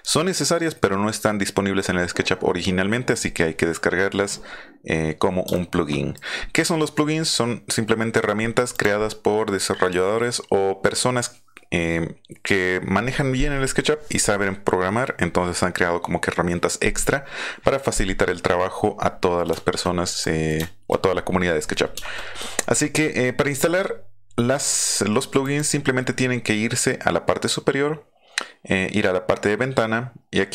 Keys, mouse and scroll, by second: 5.5 shift+middle click, 8.7 click, 19.4 middle click, 20.2 middle click, 20.6 shift+middle click, 21.9 shift+middle click, 25.4 click.